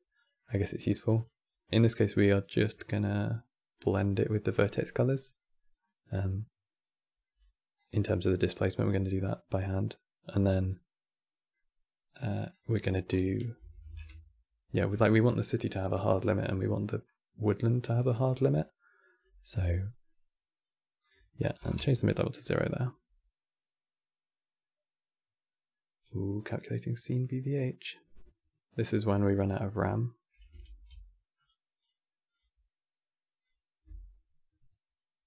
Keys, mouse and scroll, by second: 0.8 scroll down 3, 1.0-5.5 middle drag, 5.5 scroll down 2, 5.9-7.5 middle drag, 7.5 click, 8.9-11.9 middle drag, 11.9 click, 12.2-15.9 drag, 19.5-20.7 middle drag, 20.7-25.8 drag, 30.3 ctrl+s.